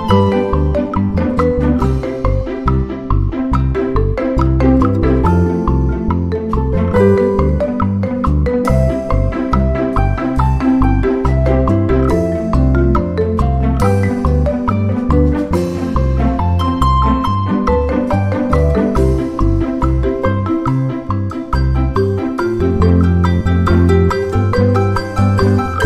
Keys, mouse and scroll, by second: 0.4-2.7 drag, 3.7 d, 4.1 click, 4.8 click, 5.5-7.0 drag, 7.0 click, 7.7 click, 8.7-10.5 drag, 10.8 ctrl+d, 11.1 ctrl+click, 12.2 ctrl+click, 13.9-15.4 drag, 16.3 click, 16.9 shift+scroll up 1, 17.5-19.1 ctrl+shift+scroll up 1, 19.2-19.9 ctrl+scroll up 2, 20.7-22.9 scroll up 2, 23.1 click, 25.0 ctrl+g.